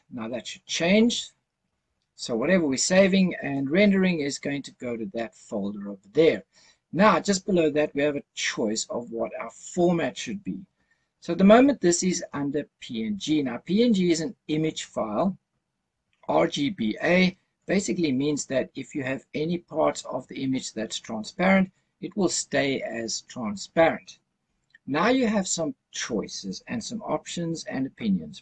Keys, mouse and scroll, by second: 6.5-7.9 scroll down 2, 7.9-9.6 scroll down 1.